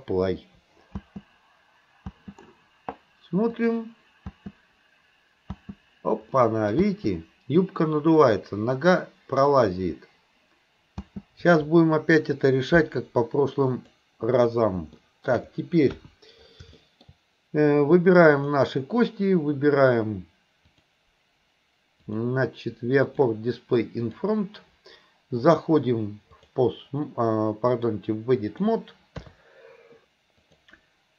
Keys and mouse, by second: 1.0 space, 2.2 space, 3.6 click, 4.3 space, 5.6 space, 6.3-6.7 middle drag, 11.0 space, 13.7 click, 15.0-15.3 shift+middle drag, 15.9 KP_1, 16.8 shift+middle drag, 18.4 click, 20.7 click, 22.0 click, 23.1 click, 24.2 click, 25.4-26.6 drag, 27.7-28.8 drag, 29.2 KP_3, 30.5 click.